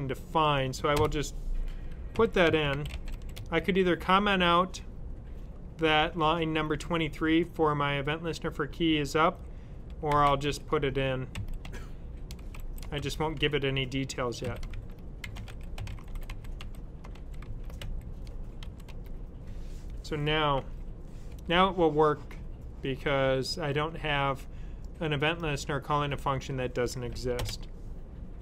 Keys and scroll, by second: 2.0-3.8 typing, 9.7-18.5 typing, 20.5 s.